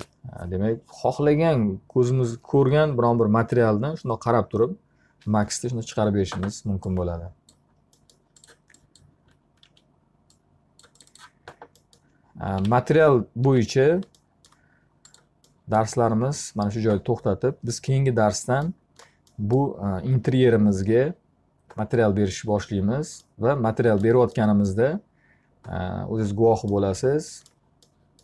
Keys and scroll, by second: 9.3 w, 12.7 p, 13.5 z.